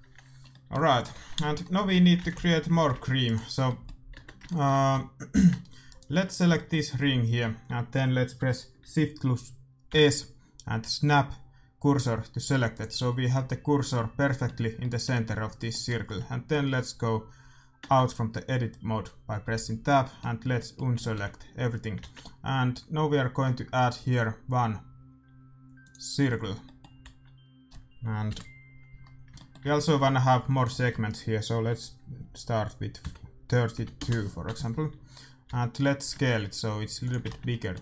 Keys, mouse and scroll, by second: 1.2 shift+z, 1.8 a, 2.1 ctrl+s, 3.3-5.0 right drag, 4.1 Tab, 4.8 a, 5.8-7.6 right drag, 7.6 middle click, 9.8 shift+s, 13.2-17.6 middle drag, 17.7 Tab, 18.3-19.4 middle drag, 19.4 a, 21.9 shift+a, 26.4-28.4 middle drag, 26.9 z, 29.0-30.0 middle drag, 30.5-32.4 drag, 35.4 s, 37.2-37.8 middle drag, 37.2 z.